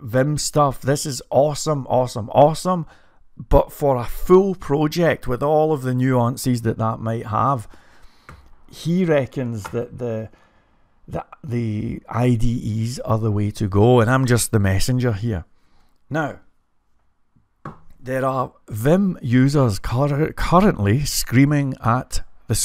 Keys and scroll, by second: 1.5-2.9 typing, 7.4-8.1 typing.